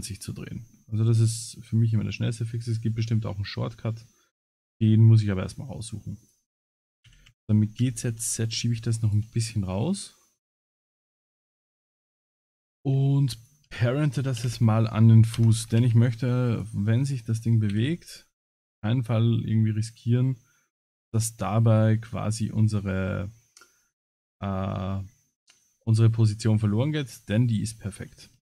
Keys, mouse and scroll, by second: 1.0 middle click, 2.9 middle click, 4.4 scroll up 4, 5.0 middle click, 5.7 click, 6.2 click, 7.0 g, 10.1 middle click, 11.4 ctrl+click, 12.4 click, 13.4 click, 14.4 ctrl+p, 15.8 ctrl+s, 16.5 click, 17.7 h, 18.3 middle click, 19.0-19.7 middle drag.